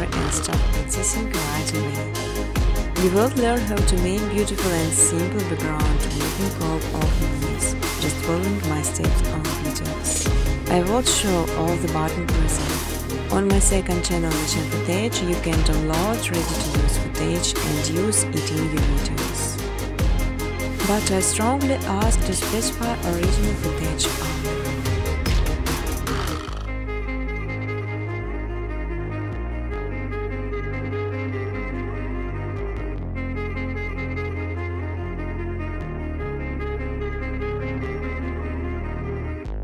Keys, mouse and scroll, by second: 1.4 click, 1.7 click, 3.8 click, 4.9 9, 5.4 click, 8.6-9.9 typing, 8.7 click, 9.7 click, 11.1 click, 12.0 click, 15.0 click, 15.8 click, 17.9 click, 18.5 click, 19.7 click, 20.4-21.8 typing, 25.7 click, 25.8-26.6 typing, 26.8 click, 30.4 click, 31.2-32.4 typing, 35.6 alt+click, 36.0-38.3 typing, 39.2 click.